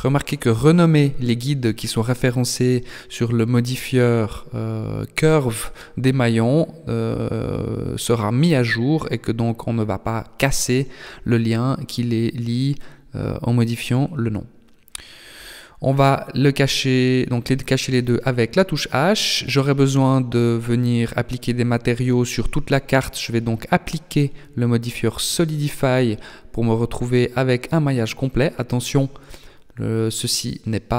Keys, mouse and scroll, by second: 3.6 h, 4.2 right click, 5.0 right click, 6.8 click, 15.4 h, 15.8 right click, 16.6 Tab, 17.4 middle click, 19.2 Tab, 20.4 click, 21.9 click, 23.5-23.9 scroll up 2, 23.9 Tab, 24.8 middle click.